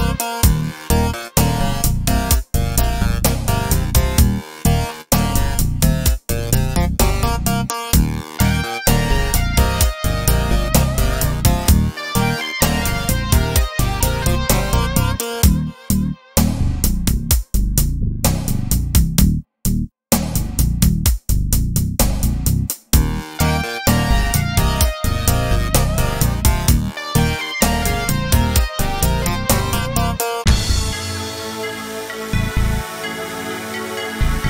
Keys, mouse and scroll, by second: 3.9 click, 5.6 r, 8.4 right click, 9.0-10.2 drag, 9.9 r, 10.2 r, 11.7 x, 12.2 click, 13.7 g, 15.5 click, 16.1 g, 20.0 click, 21.1 x, 21.6 x, 23.3 click, 23.4-24.9 middle drag, 23.4 g, 24.9 click, 26.2 r, 27.1 middle click, 27.1 scroll up 3, 27.2-31.8 drag, 32.6-34.3 middle drag, 34.3-34.4 drag.